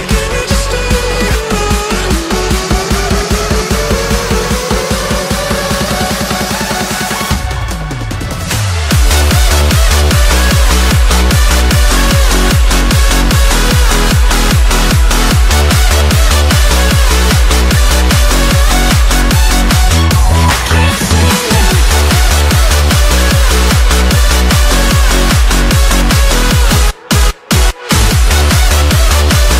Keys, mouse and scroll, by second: 0.4 shift+d, 3.1 click, 3.7 middle click, 4.1-4.7 scroll down 1, 4.7-8.0 shift+middle drag, 12.7-15.1 shift+middle drag, 15.1 click, 16.1 click, 16.7-18.4 drag, 18.9 click, 19.4-21.2 drag, 22.1-24.0 drag, 24.3 click, 25.1-26.6 drag, 27.5-29.1 drag.